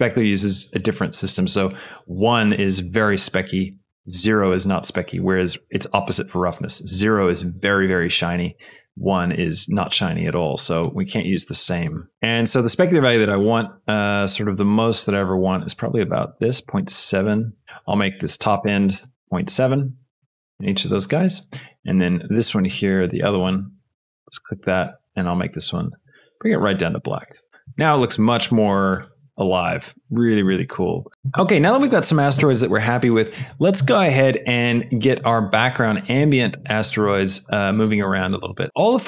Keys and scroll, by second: 20.4 Return, 20.4 KP_7.